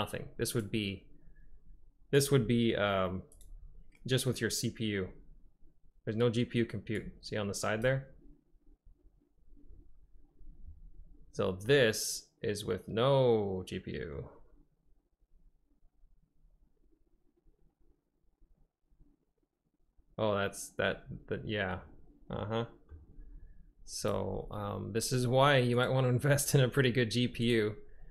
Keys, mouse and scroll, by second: 2.3 click, 3.7 click, 7.0-8.0 drag, 11.8-14.0 drag, 14.0 middle click, 21.9-22.6 drag, 22.6 middle click, 24.1-26.1 drag.